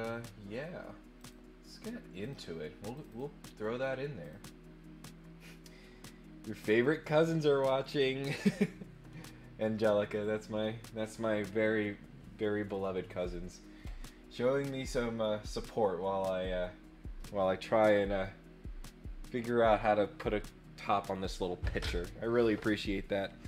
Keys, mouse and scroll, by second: 1.2 click, 2.2 click, 2.9 click, 4.2 click, 14.8 click.